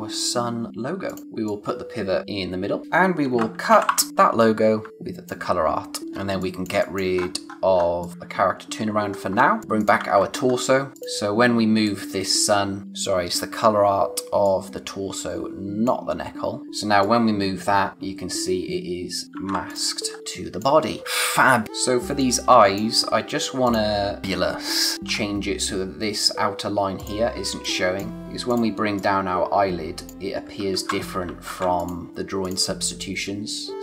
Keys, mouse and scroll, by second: 3.1-4.3 typing, 4.1 click, 4.9 click, 6.0 scroll down 1, 6.1 space, 6.3 click, 6.6 space, 6.7 click, 7.1-8.0 scroll up 1, 8.0 click, 8.1 d, 9.0-9.3 scroll down 1, 9.3 space, 9.5 click, 9.6 scroll up 1, 9.7 click, 9.9 a, 10.4-10.9 scroll up 1, 10.9 click, 12.8 space, 14.4 click, 19.4 z, 19.6 click, 20.0 scroll down 1, 20.2 space, 21.6 scroll down 1, 22.0 space, 22.1 click, 22.5 space, 23.0-23.4 scroll up 1, 23.6 click, 23.9 scroll down 1, 24.1 space, 25.1-26.9 scroll up 1, 26.9 click, 27.2 scroll down 1, 27.4 space, 27.6 click, 27.9 space, 28.1 click, 30.7 ctrl+z, 31.4 ctrl+z, 31.7 click, 33.2 scroll up 1, 33.7 click.